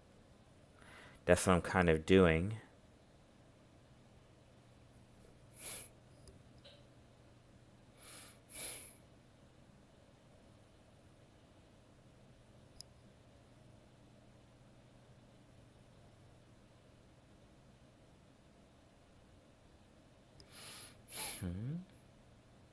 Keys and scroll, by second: 12.0 ctrl+z, 14.1 ctrl+z, 22.6 ctrl+z.